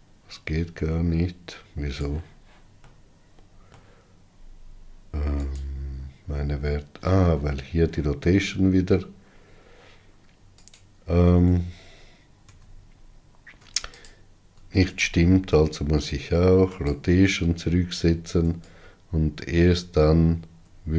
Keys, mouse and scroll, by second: 3.5-4.9 middle drag, 4.9-6.2 scroll up 2, 6.2 click, 17.5 ctrl+a, 20.1-20.9 shift+drag.